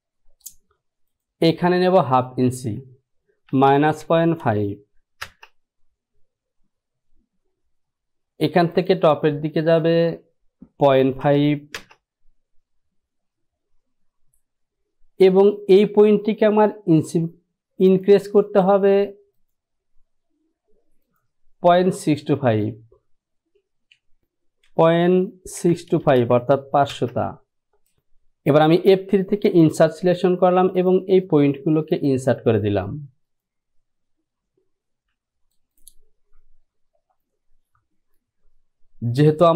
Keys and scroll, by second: 2.8 Down, 3.6 KP_Subtract, 4.2 KP_Decimal, 4.6 KP_5, 5.4 Return, 10.4 Down, 11.0 KP_Decimal, 11.4 KP_5, 11.9 Return, 24.2 Down, 25.0 KP_Decimal, 25.7 KP_6, 26.0 KP_2, 27.1 Return.